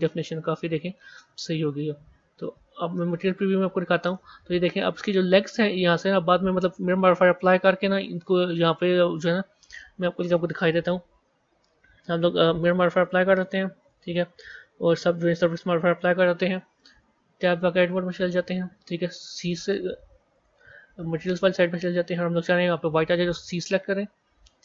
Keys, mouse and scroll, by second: 0.0-1.5 middle drag, 1.5-2.0 scroll down 1, 2.0 Tab, 3.4 z, 4.0-6.2 middle drag, 6.2-8.8 scroll up 4, 8.8-12.7 scroll up 1, 12.7-17.3 drag, 17.3 b.